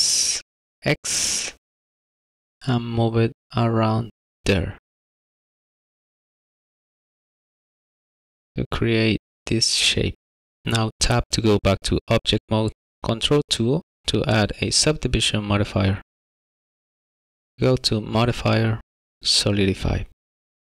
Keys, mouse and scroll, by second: 0.5 s, 1.0 x, 3.2 s, 7.6 middle click, 11.7 Tab, 13.7 ctrl+2, 15.3-15.7 scroll up 1, 15.7 middle click, 17.4 click.